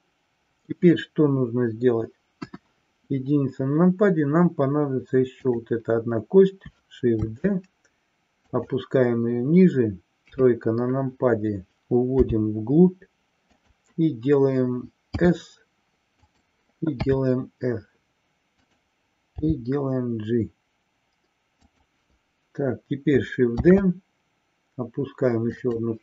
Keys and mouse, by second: 2.4 KP_1, 5.3 click, 7.3 shift+d, 8.6 click, 10.3 KP_3, 12.3 g, 13.6 click, 16.3 click, 18.8 click, 21.8 click, 23.6 shift+d, 25.8 click.